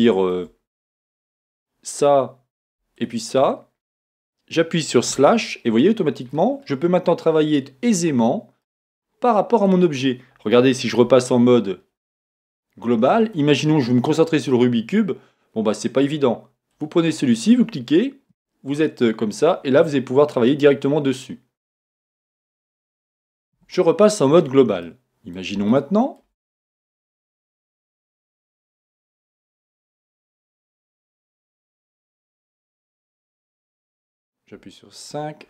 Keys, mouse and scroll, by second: 0.3-1.2 shift+scroll up 1, 1.2 click, 3.0 shift+click, 5.1 KP_Divide, 6.3-9.8 middle drag, 8.8 scroll up 1, 11.0 KP_Divide, 11.0-16.7 middle drag, 12.8 KP_Divide, 13.6 scroll up 1, 15.9 scroll up 1, 16.0-16.7 scroll down 1, 16.7 click, 18.3 KP_Divide, 18.3 middle click, 18.7-29.3 middle drag, 19.0-19.8 scroll down 1, 23.6 KP_Divide, 24.2-24.8 scroll down 1, 31.4-32.5 shift+middle drag, 32.5-32.9 scroll down 1, 33.2-34.5 scroll up 1, 34.5 KP_5, 35.0 middle click, 35.1-35.4 scroll down 1.